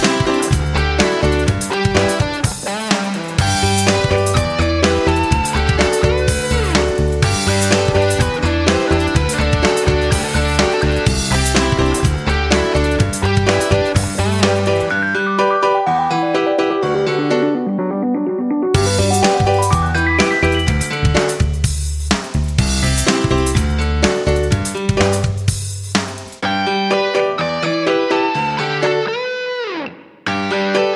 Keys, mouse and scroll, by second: 22.6 Left, 24.0 Up, 26.9 shift+click, 27.4 shift+click.